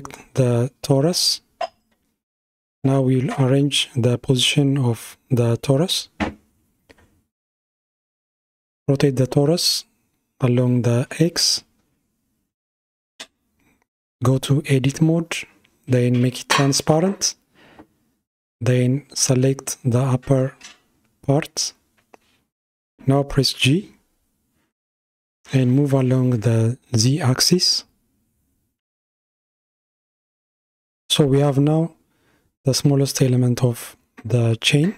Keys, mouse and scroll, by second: 4.5 KP_1, 7.6 r, 14.8 Tab, 16.4 alt+z, 18.2-18.8 scroll up 1, 18.8 scroll up 2, 19.7 click, 23.1 g, 28.9 scroll down 4, 30.2 Tab, 31.2 alt+z, 32.9-34.9 shift+middle drag.